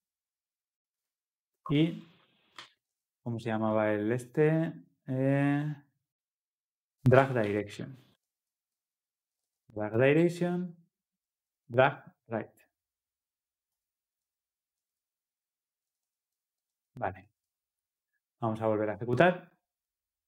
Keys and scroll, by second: 2.6 Tab, 10.2 Return, 17.4 Return, 19.0 ctrl+F10.